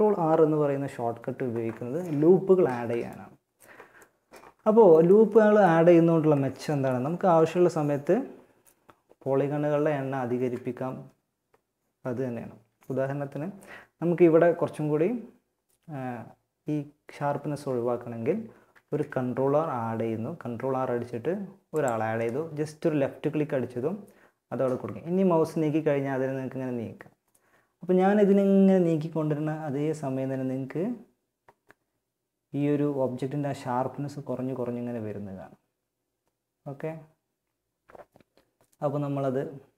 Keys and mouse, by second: 2.3-8.8 middle drag, 17.9 ctrl+r.